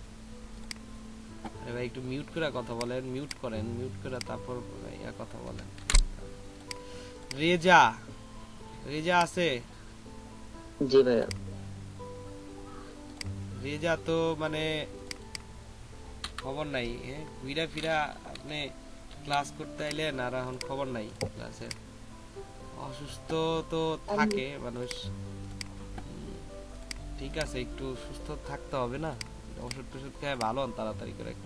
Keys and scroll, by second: 5.8 ctrl+z, 16.4 BackSpace, 19.3 p.